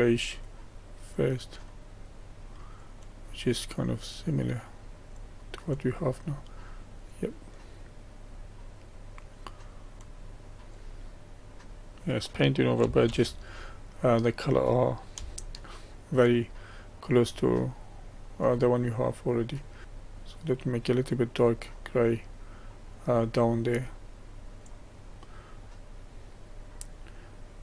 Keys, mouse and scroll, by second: 0.4-13.1 drag, 13.1 ctrl+z, 13.6-18.8 middle drag, 18.8-19.4 scroll up 1, 19.4-19.8 scroll up 1, 19.8-24.8 drag, 24.8-25.6 scroll down 1, 25.6-27.6 drag.